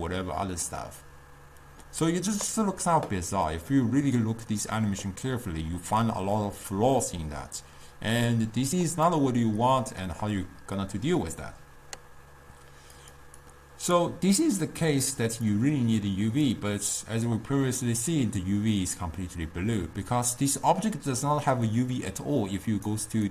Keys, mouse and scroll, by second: 12.7-13.5 middle drag, 13.5-23.3 drag.